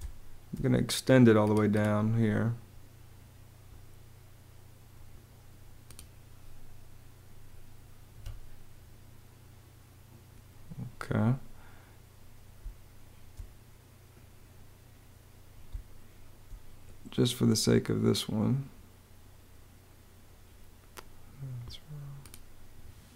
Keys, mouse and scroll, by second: 7.8 Escape, 12.5 space, 15.3 space, 23.0 BackSpace.